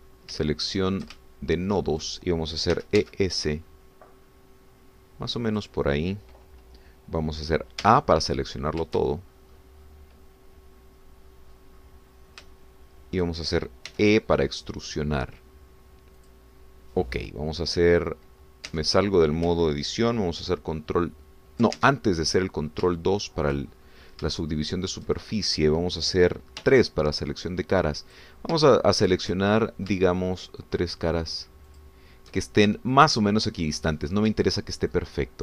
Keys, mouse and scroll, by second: 1.0-1.4 shift+scroll up 3, 1.4 shift+click, 2.2 ctrl+shift+click, 3.7 e, 4.0 s, 6.5 click, 8.8 a, 9.3 click, 10.1-10.8 shift+scroll down 3, 11.2-11.6 scroll down 2, 11.8-12.7 scroll down 4, 13.5 shift+click, 14.9 e, 17.2 click, 19.7 Tab, 22.9 ctrl+Tab, 23.2 ctrl+click, 24.0 shift+click, 24.8-25.3 shift+scroll up 4, 25.4 shift+middle click, 26.3 shift+scroll up 2, 27.6 3, 29.0 click, 29.7 shift+middle click, 30.5 shift+middle click, 31.1 shift+middle click, 32.7 shift+click, 33.4 shift+middle click, 34.3 shift+middle click, 34.8 shift+middle click.